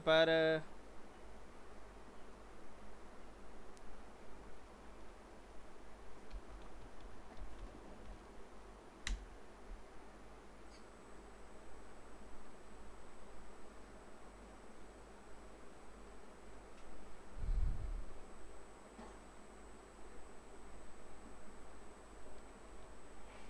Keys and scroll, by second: 7.9 typing, 9.1 Return, 22.7 Left.